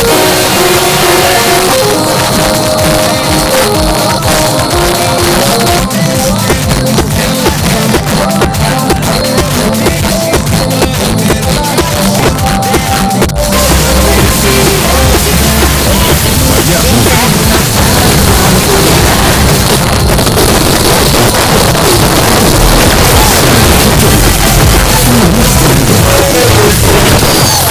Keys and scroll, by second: 1.5 Page_Down, 19.6 Page_Down.